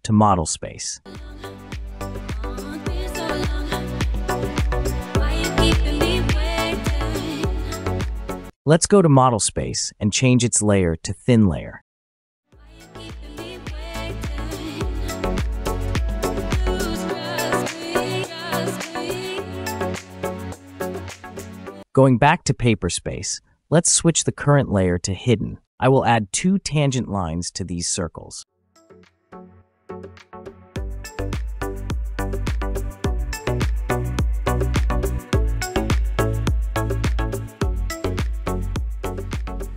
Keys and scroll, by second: 2.0 Return, 4.3 Return, 15.1 Escape, 24.2 typing, 25.1 Return, 26.8-27.2 typing, 29.3 Return, 30.2-30.8 typing, 31.5 Return, 32.8 Return, 35.1-35.5 typing, 36.3 Return, 38.2-38.6 typing.